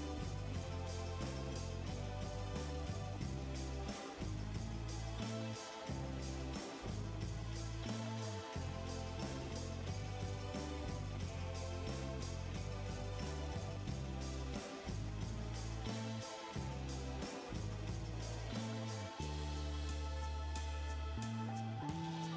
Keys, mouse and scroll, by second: 15.4 typing, 15.9 Return.